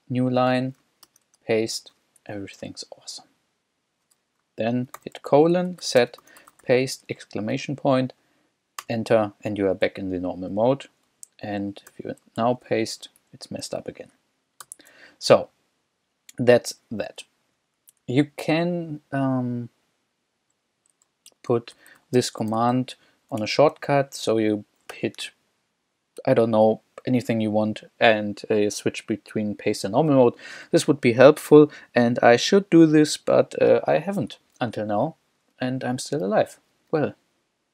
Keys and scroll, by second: 1.1 super+v, 2.2 Escape, 5.0-7.5 typing, 8.8 Return, 10.6 k, 11.1 j, 11.9 o, 12.4 super+v, 13.3 super+Escape, 14.7 u, 15.4 k, 17.9 j, 18.5 j, 21.3-23.2 typing, 23.4 Escape, 34.4 k, 35.7 k.